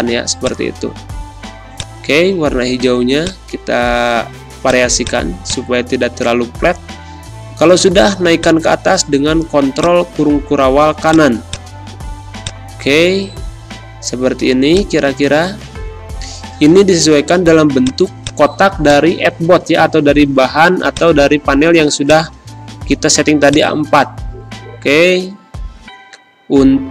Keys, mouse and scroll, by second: 6.8 ctrl+shift+], 8.1 space, 8.3 click, 8.6 space, 9.7-25.3 drag, 25.3 0, 25.6 Return.